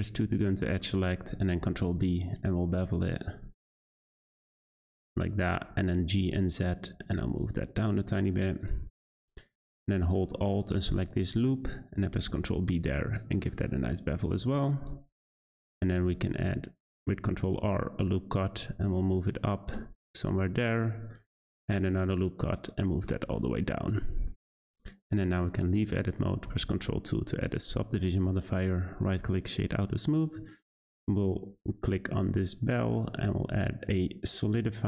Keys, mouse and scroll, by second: 0.4 middle click, 1.6 b, 5.5 g, 8.9-10.6 scroll up 6, 10.6 click, 10.8 click, 12.1 b, 14.4 Tab, 15.2 Tab, 15.5 shift+middle click, 16.0 r, 20.4-20.8 scroll down 2, 20.8 shift+middle click, 21.4 r, 23.0-23.4 scroll down 3, 23.4-24.5 middle drag, 24.5 Tab, 26.5 ctrl+2, 27.4-28.6 right drag, 28.6 click, 29.2-29.8 middle drag, 29.8 click.